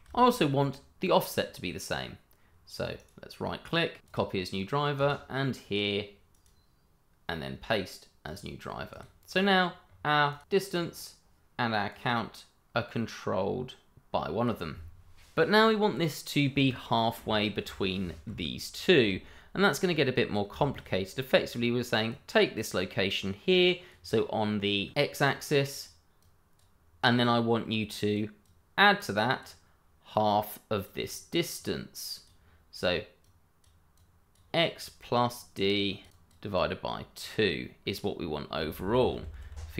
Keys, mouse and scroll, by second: 2.9 right click, 4.1 click, 6.3 right click, 8.2 click, 9.2 scroll down 1, 9.8 scroll up 1, 10.3 click, 12.4 click, 16.5 click, 17.2-18.0 scroll up 1, 18.0 shift+middle click, 19.6 click, 20.2 scroll up 1, 20.5 shift+middle click, 20.8 scroll up 1, 22.0 click, 25.2 click, 31.5 double click, 33.2 click, 35.0 double click, 36.1 click, 36.5 double click, 38.5 click, 38.7 ctrl+z.